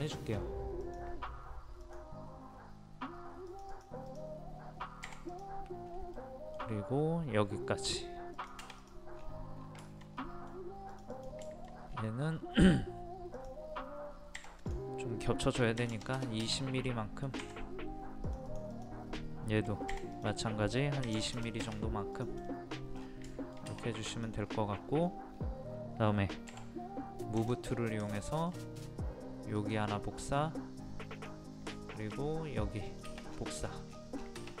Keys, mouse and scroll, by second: 0.0 click, 2.5-3.0 scroll up 1, 3.5 click, 5.8 scroll down 1, 6.2 middle click, 8.3 click, 9.1 scroll down 1, 9.9 shift+middle click, 10.9 click, 11.9-12.2 scroll up 1, 13.3 click, 14.4 p, 14.6 click, 15.8 KP_2, 16.9 middle click, 17.4 Escape, 18.2 click, 19.9 p, 20.1 click, 21.0 KP_2, 21.3 KP_0, 22.1 click, 22.5 middle click, 22.7-23.0 scroll down 1, 23.0 scroll up 1, 24.1 click, 24.4 scroll up 1, 25.7 scroll down 1, 25.8-26.5 scroll up 1, 27.4 click, 27.7-28.0 scroll down 1, 28.1-29.2 shift+middle drag, 29.6 click, 31.8 shift+middle click, 32.9 click, 33.3 scroll down 1, 33.9 scroll up 1, 34.2-34.6 scroll down 1.